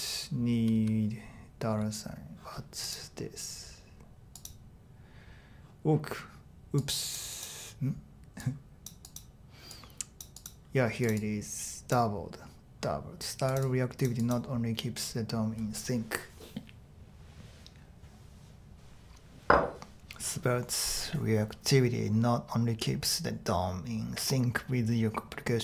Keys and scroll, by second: 0.5 typing.